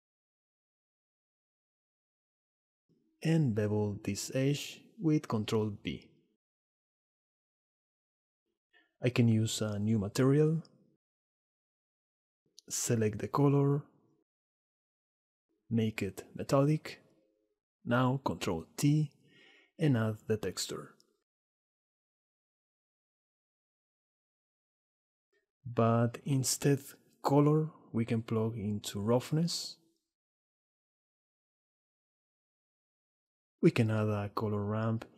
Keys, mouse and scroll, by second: 0.1 click, 0.6 s, 0.8 click, 1.3 s, 1.8 click, 2.7 click, 4.3 ctrl+b, 6.4 Tab, 6.5 click, 6.7 middle click, 7.2 s, 7.7 click, 9.5-11.4 drag, 12.2 drag, 13.4 click, 16.8-18.2 drag, 18.3 shift+a, 18.4 click, 19.3 ctrl+t, 20.0 click, 26.6-28.4 drag, 31.1 shift+a.